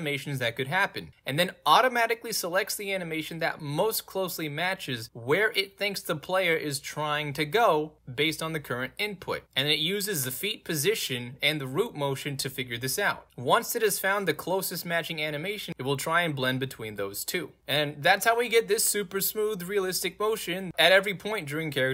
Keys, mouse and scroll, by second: 1.7 click, 1.8 middle click, 1.9-2.3 scroll up 3, 2.3-2.8 scroll down 2, 3.2-4.4 scroll down 2, 4.4 scroll down 1, 4.5-5.2 scroll up 2, 5.2 click.